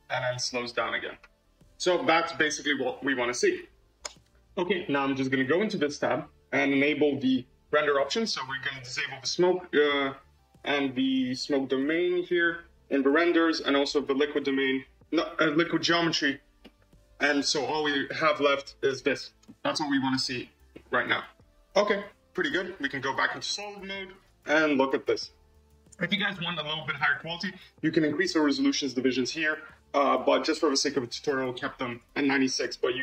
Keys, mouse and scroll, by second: 4.1 space, 5.8-8.2 drag, 8.8 click, 9.5 click, 10.6 click, 11.8 click, 12.3 click, 13.9 click, 15.6 click, 16.5-20.9 middle drag, 20.9 click, 22.7 z, 23.4-24.3 middle drag, 24.3-24.7 scroll up 4, 24.7-26.3 right drag, 26.3-28.7 shift+middle drag, 29.6-30.2 scroll up 2, 30.2-33.0 shift+middle drag.